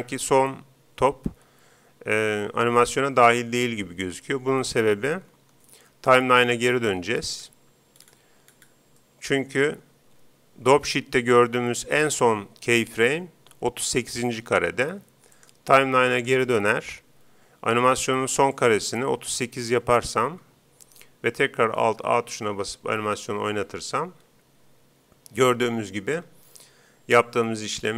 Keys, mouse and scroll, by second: 5.4 Escape, 7.2-10.7 middle drag, 12.9-14.6 drag, 15.3-17.1 drag, 18.6-20.1 drag, 22.2 alt+a.